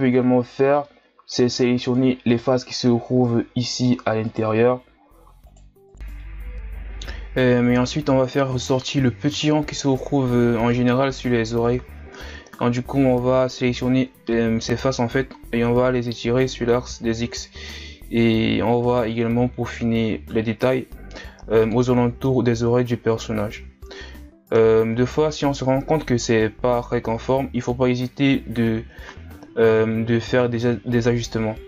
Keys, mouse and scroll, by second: 0.6 scroll down 2, 0.8 middle click, 1.6 ctrl+Tab, 2.7-3.2 scroll up 1, 3.2-4.2 middle drag, 4.2 right click, 5.5 right click, 5.9 shift+right click, 6.1 shift+right click, 6.4 KP_1, 7.0 middle click, 7.5 shift+right click, 8.0 KP_1, 8.5 g, 9.9 Tab, 10.0 scroll down 2, 10.2 scroll up 2, 10.3 Tab, 10.4 middle click, 11.2 click, 11.4 middle click, 11.6 ctrl+z, 11.9 shift+right click, 12.0 shift+right click, 12.1 middle click, 12.4 click, 12.9 KP_1, 13.2-13.7 ctrl+scroll up 4, 13.7 ctrl+Tab, 14.2 middle click, 14.9 KP_1, 15.8 right click, 16.4 right click, 17.4 Tab, 17.5 scroll down 1, 17.8 scroll up 1, 18.0 middle click, 18.6 KP_1, 18.8-19.3 scroll down 5, 19.3-19.8 ctrl+scroll up 5, 19.8 Tab, 19.9 ctrl+scroll down 1, 20.3 z, 20.4-20.8 scroll up 1, 20.8 z, 21.0 middle click, 21.3 right click, 21.5 shift+right click, 21.8 ctrl+KP_Add, 22.1 KP_1, 22.5 g, 24.3 middle click, 24.5 scroll up 1, 24.7 ctrl+Tab, 25.0 right click, 25.4 shift+right click, 25.5 shift+right click, 25.6 shift+right click, 25.9 KP_1, 26.3 g, 27.6 g, 29.0 e, 30.3-30.8 scroll down 5, 30.4 Tab, 30.8-31.2 scroll up 7, 31.2 Tab, 31.3 middle click.